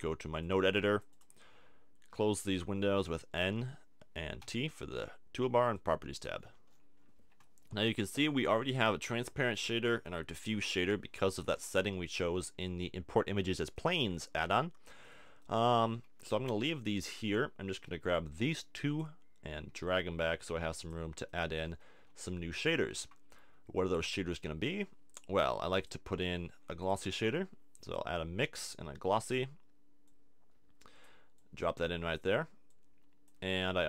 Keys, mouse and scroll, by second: 3.0 n, 4.4 t, 5.7-7.4 drag, 12.3 a, 15.8 a, 16.3 a, 17.7 b, 19.7 g, 20.9-22.1 drag, 22.1 a, 23.8 shift+a, 26.9 click, 27.1 shift+a, 29.3-30.5 drag, 33.5-33.8 drag.